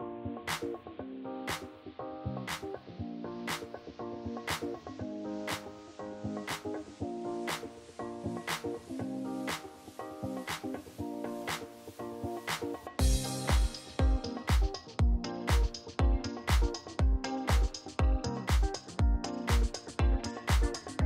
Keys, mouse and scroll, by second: 0.1 click, 1.2 alt+click, 1.5-1.8 typing, 1.9 alt+middle click, 2.1 click, 2.5 Delete, 2.8 click, 3.1 click, 3.3 Tab, 3.8-6.9 typing, 4.8 click, 6.3 click, 6.4 click, 7.0 click, 7.6 middle click, 7.6 middle click, 7.8 middle click, 8.3 click, 8.7 click, 10.1 click, 12.9 click, 16.5 click, 18.5-19.8 drag, 20.3-21.0 drag.